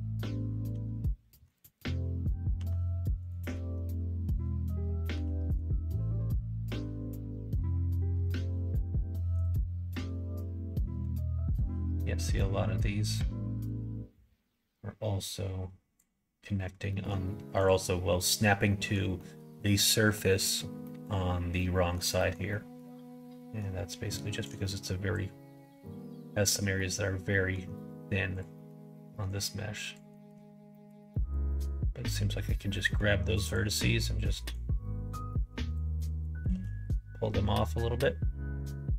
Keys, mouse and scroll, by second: 0.6 alt+s, 2.5 g, 5.1 g, 9.5-11.0 middle drag, 11.4 click, 11.7 middle click, 13.6-16.8 drag, 16.8 middle click, 17.6 click, 18.6 middle click, 19.1 middle click, 20.1 middle click, 20.8 middle click, 21.5 middle click, 22.1 middle click, 22.4 middle click, 22.8 middle click, 24.4 click, 25.8 middle click, 26.7 middle click, 28.2 click, 28.5 middle click, 29.2 click, 30.1 middle click, 30.7 middle click, 31.1 middle click, 31.4-33.0 middle drag, 33.4 click, 34.5-35.7 drag, 35.9 middle click, 36.5 ctrl+z, 37.3 middle click.